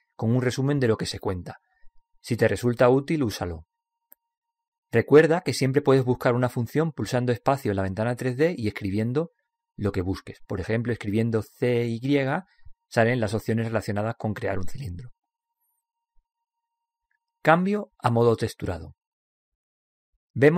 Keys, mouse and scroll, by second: 19.5 click.